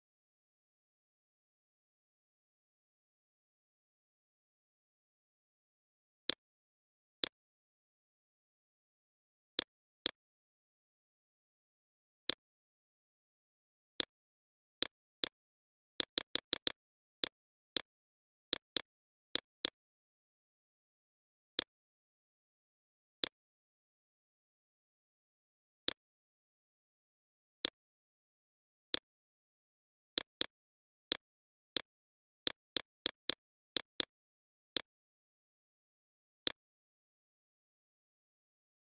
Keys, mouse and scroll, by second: 3.6 BackSpace, 3.9 BackSpace, 4.6-13.9 drag, 14.7 alt+shift+click, 16.3 alt+shift+click, 16.7-34.8 drag, 38.6-38.9 drag.